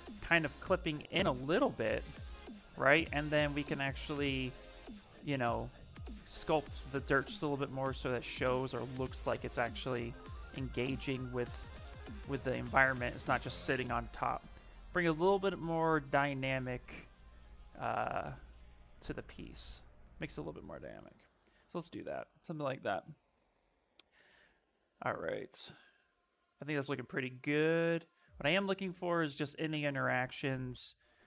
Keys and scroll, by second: 1.1 ctrl+z, 2.0 shift+f, 2.6 shift+f, 15.5 s.